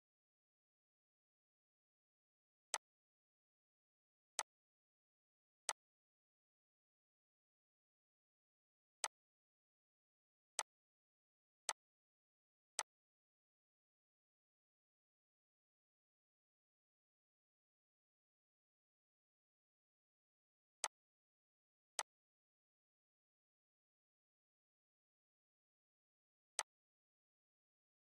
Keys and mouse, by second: 2.4 click, 8.7 click, 15.4 Right, 20.5 click, 23.5 Up, 26.2 click.